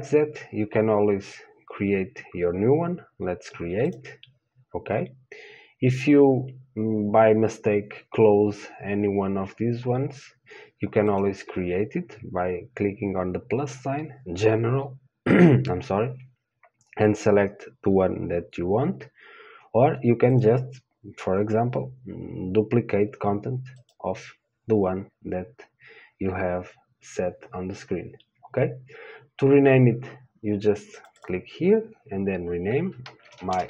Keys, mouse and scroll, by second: 31.2-33.6 drag.